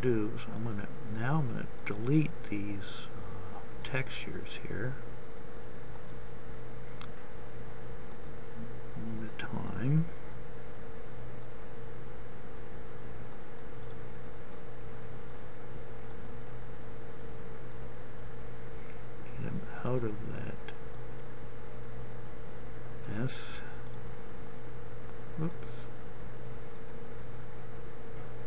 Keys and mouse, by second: 1.1-4.1 drag, 4.9-6.7 drag, 6.9-23.4 drag, 23.9-25.7 drag, 25.7 right click, 26.2-28.4 drag.